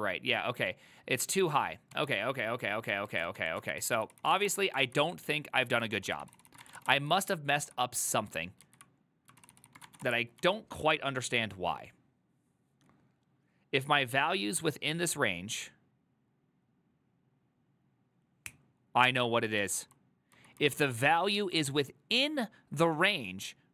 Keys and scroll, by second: 3.2 ctrl+a, 3.5-5.0 typing, 3.8 ctrl+c, 3.9 ctrl+c, 4.1 ctrl+c, 6.0 ctrl+d, 6.3 ctrl+c, 6.4 ctrl+c, 6.5-7.3 typing, 7.7 ctrl+u, 8.7 ctrl+u, 9.5 ctrl+c, 9.6 ctrl+c, 9.7-11.4 typing, 21.6 typing, 23.2 typing.